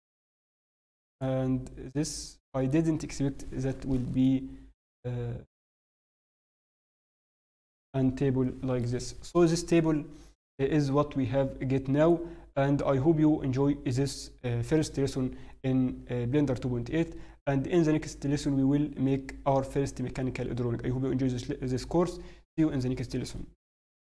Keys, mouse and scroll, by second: 1.8 middle click, 2.7-3.9 scroll down 1, 4.2 middle click, 9.2-9.7 scroll down 1, 9.7 middle click, 15.2-15.5 scroll down 1.